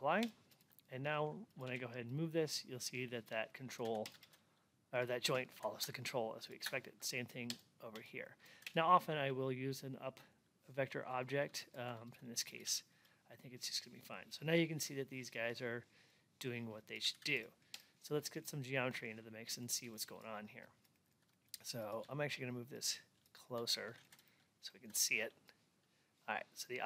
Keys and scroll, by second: 23.5 alt+x.